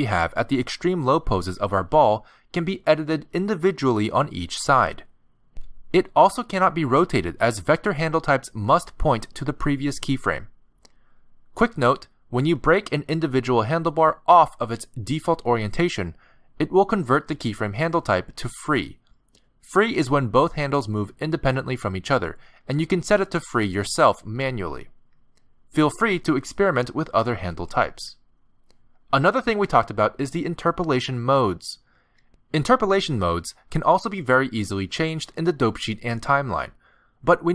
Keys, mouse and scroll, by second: 1.4 click, 2.2 g, 5.4 click, 5.6 g, 8.4 click, 8.9 r, 12.6 click, 13.3 g, 17.8 ctrl+Tab, 20.4 v, 22.8 click, 23.6 v, 27.9 ctrl+z, 28.8 ctrl+Tab, 29.9 ctrl+z, 30.5 ctrl+z.